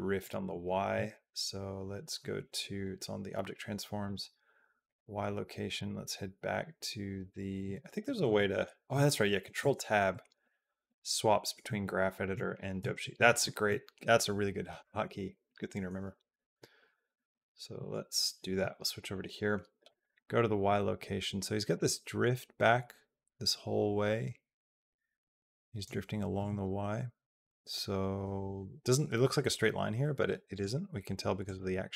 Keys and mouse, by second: 3.8 click, 4.6 click, 5.7-7.4 drag, 8.0 ctrl+Tab, 9.4 ctrl+Tab, 9.9 ctrl+Tab, 10.2 ctrl+Tab, 10.7 ctrl+Tab, 11.2 ctrl+Tab, 11.5 ctrl+Tab, 12.1 ctrl+Tab, 12.6 ctrl+Tab, 12.8 ctrl+Tab, 17.0 ctrl+Tab, 17.5 ctrl+Tab, 18.1 ctrl+Tab, 19.7 click, 20.4 middle click, 21.6-25.7 drag, 30.3 click, 31.2 click.